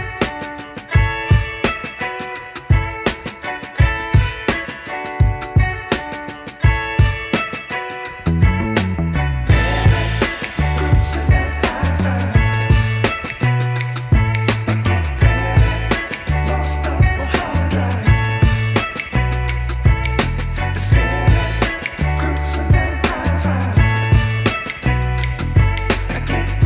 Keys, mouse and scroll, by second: 2.5 e, 3.1 scroll down 2, 3.3 middle click, 4.0-5.2 scroll down 3, 5.2 scroll down 1, 5.3-8.2 middle drag, 8.2-9.1 scroll down 4, 9.1-15.4 middle drag, 15.5 ctrl+s, 16.4 Tab, 16.9-18.3 scroll up 2, 18.3 click, 22.5 click, 23.3 KP_0, 25.1 click, 25.2 shift+a.